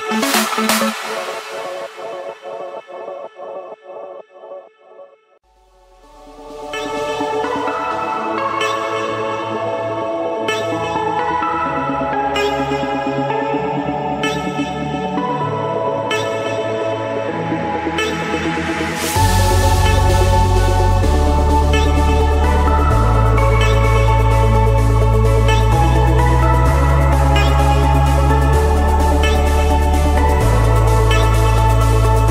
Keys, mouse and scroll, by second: 1.5-2.2 typing, 3.3 Return, 4.3-5.4 drag, 5.6-6.6 drag, 6.8-7.8 drag, 7.2 Return, 8.5 click, 9.2 middle click, 10.1 Escape, 11.4 click, 12.7 click, 19.7-20.9 drag, 21.4 click, 21.8 Escape, 23.4 click, 24.4 click, 25.0-26.2 drag, 27.0-28.2 typing, 29.1 Return, 29.2-29.9 typing, 30.9 Return, 31.6-32.3 middle drag, 31.6-31.9 scroll.